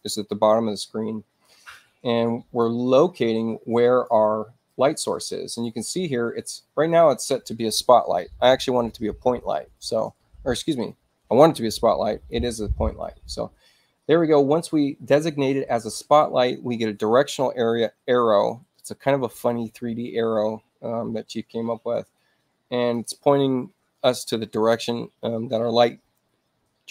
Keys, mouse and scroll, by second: 1.7 click, 3.0-3.7 scroll up 2, 3.7 click, 4.2-4.6 scroll down 2, 4.6-7.1 drag, 12.0 click, 13.2-22.9 drag.